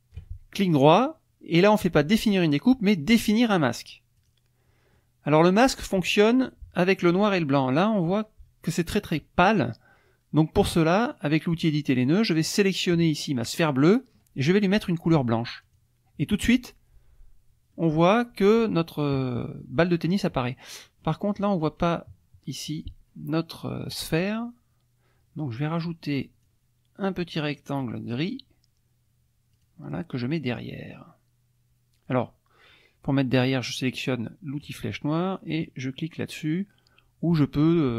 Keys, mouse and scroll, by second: 0.5 shift+right click, 4.2 click, 4.9 middle click, 11.6 click, 12.6 click, 15.6 click, 17.7 middle click, 20.8 click, 25.7 click, 26.4-28.3 drag, 29.6 click, 34.6 click.